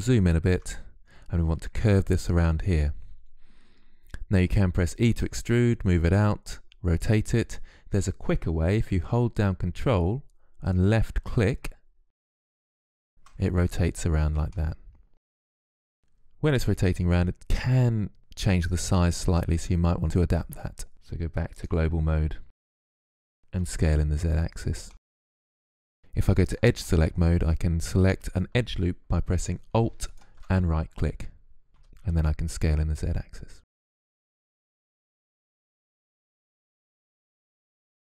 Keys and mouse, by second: 0.0 click, 0.1 middle click, 0.8-10.5 middle drag, 10.5-14.3 drag, 14.3 middle click, 15.0 middle click, 15.4-19.2 middle drag, 19.4 middle click, 19.6 middle click, 21.4-23.4 drag, 23.4 s, 24.7 click, 25.2 ctrl+Tab, 26.6 click, 26.8 click, 29.9-31.5 right drag, 31.5 s, 33.4 click, 33.6 click, 33.8 Tab, 34.1 click, 34.4 KP_3, 34.7 s, 34.9 g, 35.8 click, 36.0 click, 37.6 middle click.